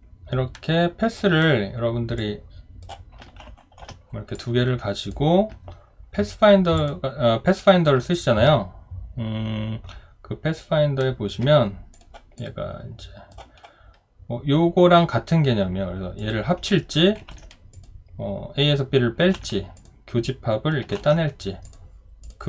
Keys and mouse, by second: 19.3 ctrl+z.